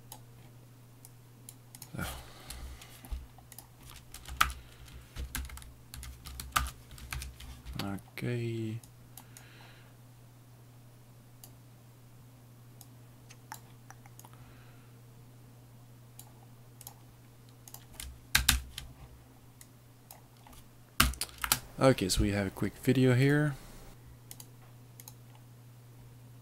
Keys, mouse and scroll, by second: 1.2 click, 1.8 click, 3.6 click, 4.4 ctrl+Home, 5.4 ctrl+-, 5.5 ctrl+-, 6.0 ctrl+-, 6.6 Home, 9.0 click, 9.5 click, 12.2 click, 13.0 click, 14.3 click, 16.9 click, 18.5 ctrl++, 19.8 click, 21.0 Home, 21.5 space, 23.9 click.